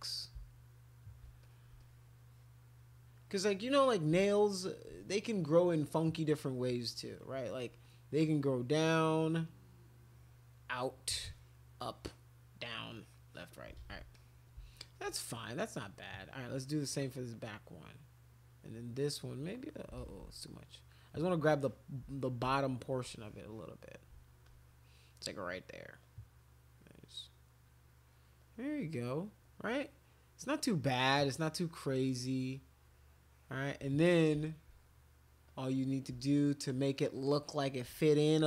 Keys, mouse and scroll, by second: 1.4 alt+click, 1.8-3.4 drag, 4.3 alt+click, 8.4-13.7 drag, 8.6 middle click, 13.8 ctrl+z, 14.1 click, 15.4 click, 17.3-19.8 drag, 20.0 ctrl+z, 20.1 ctrl+z, 20.8 click, 21.6 click, 23.1 click, 24.4 click, 26.0-27.5 drag, 28.4 click, 29.0 click, 29.7-33.7 drag, 34.5 alt+click, 35.5 click, 36.4 alt+click, 37.0 alt+click, 37.3 alt+click.